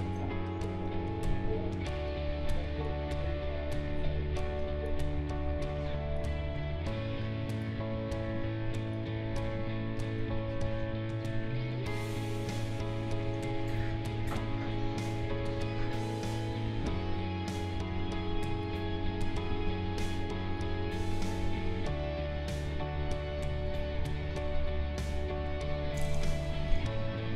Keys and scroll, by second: 13.7 Delete.